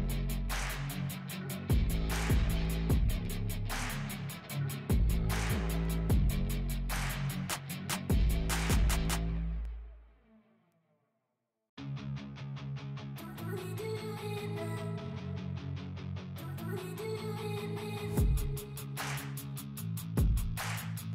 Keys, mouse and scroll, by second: 0.0 click, 1.0-1.6 scroll down 1, 1.6 F4, 2.2 scroll up 1, 3.0 click, 4.2 scroll up 1, 4.5 click, 4.9 scroll down 1, 5.0 F4, 5.4 scroll up 1, 6.2 click, 7.1 F4, 8.1-10.4 drag, 10.5-12.5 drag, 12.5 scroll up 1, 13.0-16.6 drag, 16.6 F4, 17.0 scroll up 1, 17.6 click, 18.5 scroll up 1, 19.0 click, 20.2 F4.